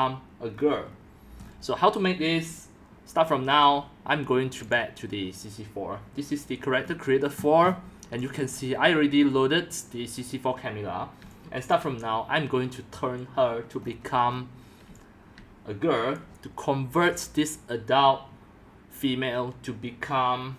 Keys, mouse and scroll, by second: 0.4 click, 0.5-1.8 middle drag, 0.5-1.0 scroll, 1.5 scroll, 4.6 click, 5.5-6.8 drag, 6.8-8.1 scroll down 18, 8.1 click, 9.2-11.4 drag, 11.2 c, 13.8-14.4 scroll, 14.8-16.6 typing, 16.1-20.5 drag.